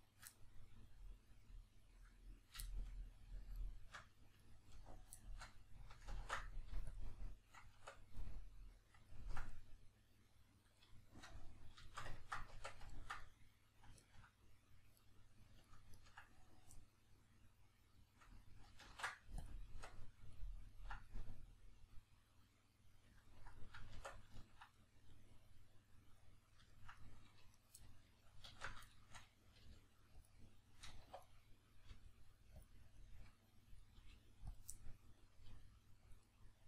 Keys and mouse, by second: 0.3-3.5 middle drag, 3.5 shift+right click, 4.4 ctrl+right click, 5.1-6.1 shift+middle drag, 6.1 ctrl+e, 7.8 Tab, 8.2-15.0 middle drag, 12.6 Tab, 15.0 right click, 15.6 ctrl+right click, 16.0 ctrl+right click, 16.8-27.6 middle drag, 18.9 ctrl+e, 24.0 Tab, 27.6 right click, 27.8-30.3 middle drag, 28.5 alt+q, 29.6 g, 30.3 click, 31.0 1, 31.2 right click, 31.9 g, 32.6 click, 32.9 right click, 33.8 right click, 33.9 g, 34.5 click, 34.7-36.1 middle drag, 35.5 g, 36.1 click, 36.2-36.6 middle drag.